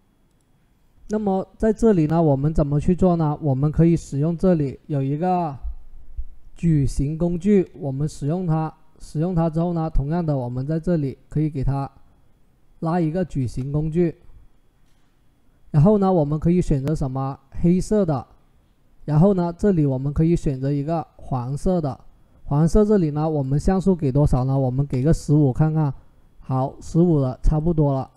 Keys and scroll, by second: 23.9-24.8 typing.